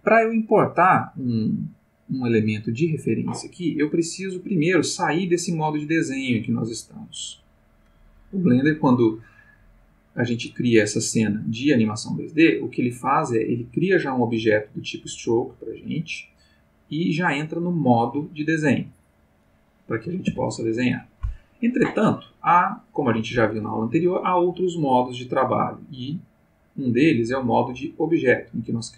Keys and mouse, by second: 10.2 click, 12.5 click, 18.9 click, 20.3 ctrl+z, 26.7 click, 27.8 click.